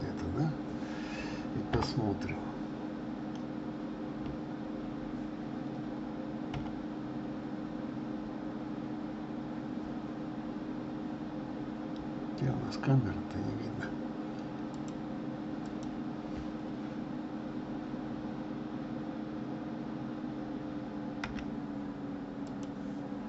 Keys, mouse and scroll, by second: 1.8 KP_0, 6.6 KP_7, 11.4-12.3 scroll down 8, 13.3 scroll up 1, 14.8 click, 15.8 click, 21.4 g.